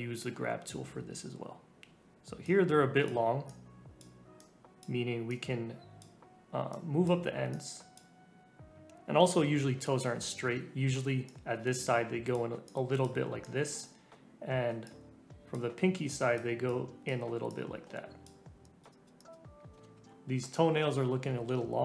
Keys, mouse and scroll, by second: 2.2 scroll up 1, 2.4-8.6 drag, 8.6 scroll up 1, 8.7-9.2 scroll down 1, 9.2-10.2 scroll down 1, 10.2-11.0 scroll down 1, 11.2-19.4 drag, 19.4 middle click, 19.4 scroll up 2, 19.5 scroll down 1, 19.8-20.2 scroll up 2, 20.3-21.4 typing.